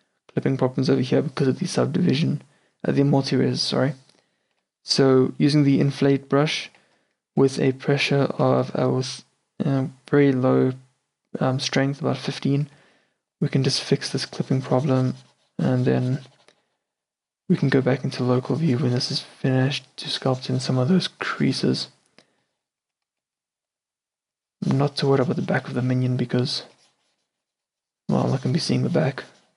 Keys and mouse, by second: 4.7 t, 6.8 t, 7.5 f, 8.8 shift+f, 12.6-13.1 drag, 13.1-16.1 middle drag, 20.5-26.5 middle drag, 26.9-29.5 middle drag.